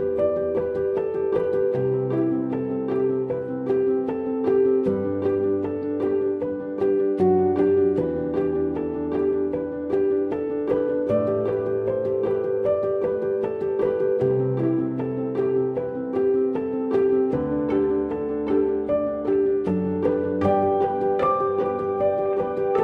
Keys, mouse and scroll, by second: 3.4 double click.